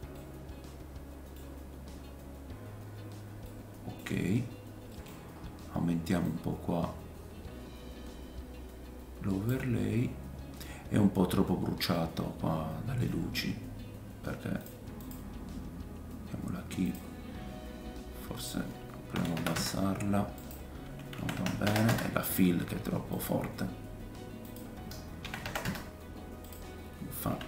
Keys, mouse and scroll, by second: 0.3 middle click, 3.4 middle click, 4.3-4.9 scroll down 2, 4.9 middle click, 5.2-6.2 scroll up 5, 6.3-14.6 drag, 6.3-14.7 middle drag, 6.3-14.6 right drag, 11.7 scroll down 1, 14.7 click, 15.1-16.8 drag, 16.9-18.4 drag, 20.4 click, 21.6 KP_0, 23.2-24.4 drag.